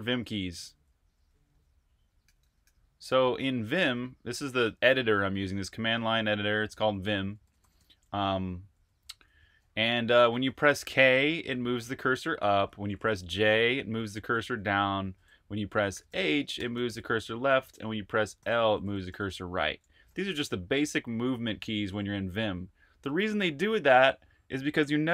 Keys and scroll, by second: 0.0-2.6 typing, 3.5 super+q, 5.4-10.5 typing, 15.8-18.5 typing, 21.5-22.4 typing.